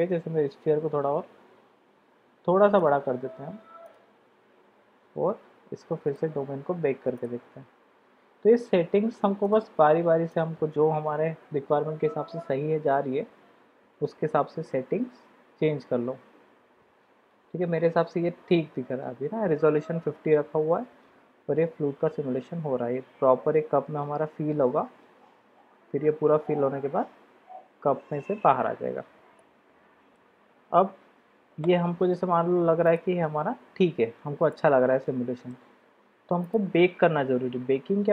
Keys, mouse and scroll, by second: 0.6 s, 3.8 click, 6.7 click, 10.3 click, 29.9-31.2 middle drag, 33.0-34.2 drag, 34.5-35.5 middle drag, 36.4 click.